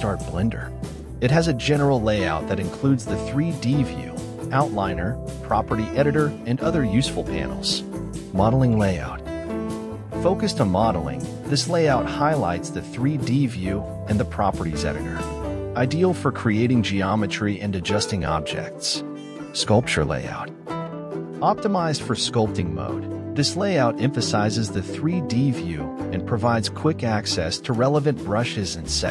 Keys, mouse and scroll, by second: 1.5-2.9 drag, 6.8-29.1 drag.